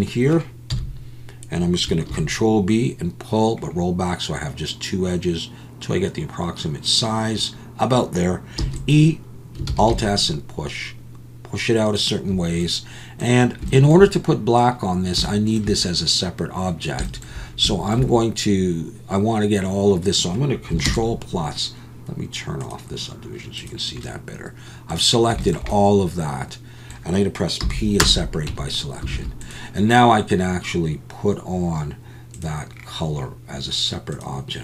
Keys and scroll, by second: 0.7 KP_1, 2.1 ctrl+b, 8.6 e, 9.7 alt+s, 20.9 ctrl+KP_Add, 27.6 p, 28.5 Tab, 29.1 alt+a.